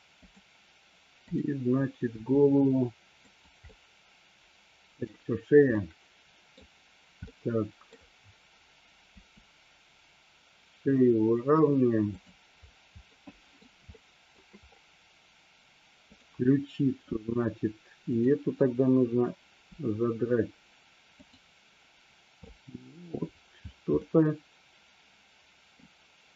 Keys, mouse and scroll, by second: 1.4 click, 2.1 r, 3.4 click, 3.8-5.1 middle drag, 5.9-6.6 middle drag, 7.4-8.1 middle drag, 9.3 r, 13.3 middle click, 14.0 shift+middle click, 18.1 click, 19.8 r, 21.3 click, 22.5-23.1 middle drag, 24.1-25.9 middle drag.